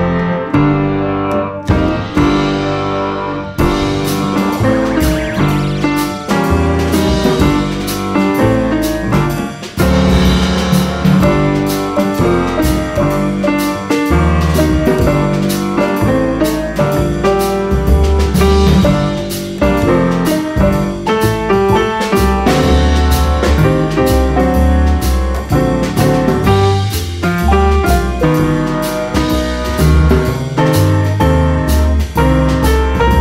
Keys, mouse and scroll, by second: 0.3 click, 1.1-1.4 scroll up 1, 2.0-2.6 drag, 2.9-3.3 scroll down 1, 3.3-3.6 scroll up 1, 3.9 click, 6.7 click, 8.1 click, 8.7-10.5 drag, 10.8 s, 12.6 click, 13.3-14.8 drag, 15.6 click, 16.3-18.8 drag, 19.1 click, 19.6 click, 20.9 click, 22.0 ctrl+z, 22.9 click, 24.4 click, 25.4-26.9 drag, 27.1-27.5 scroll up 1, 27.5 click, 28.0 click, 28.8-29.9 drag, 30.5 click, 31.4-32.8 drag.